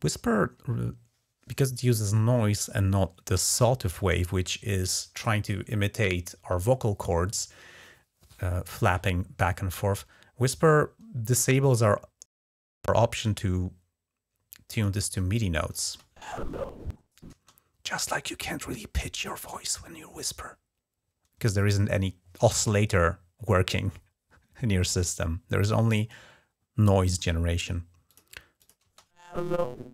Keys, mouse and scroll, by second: 14.6 click, 15.6 space, 17.1 space, 27.9 click, 28.4 click, 28.6 space.